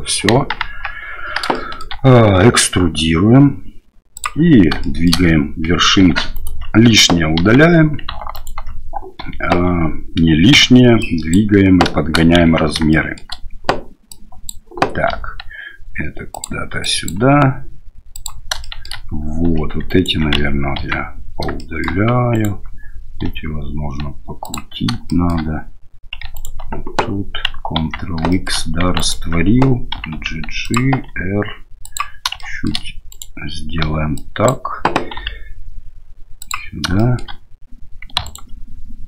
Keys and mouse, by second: 0.3 KP_1, 0.6 KP_3, 1.5 shift+click, 2.4 e, 5.0 shift+click, 6.0 2, 6.3 alt+right click, 7.4 ctrl+x, 8.3 alt+right click, 9.5 1, 10.5 1, 11.1 click, 12.4 shift+z, 12.9 shift+middle click, 14.2 click, 15.1 g, 16.9 click, 17.1 g, 18.7 shift+middle click, 19.4 2, 19.9 alt+right click, 20.8 ctrl+x, 21.6 shift+middle click, 22.3 alt+click, 23.2 r, 25.0 shift+middle click, 26.3 alt+right click, 27.8 ctrl+x, 28.3 shift+click, 28.9 alt+right click, 29.9 g, 31.1 r, 32.4 shift+middle click, 33.1 right click, 33.8 1, 34.3 click, 35.2 g, 37.1 shift+middle click, 38.2 alt+click.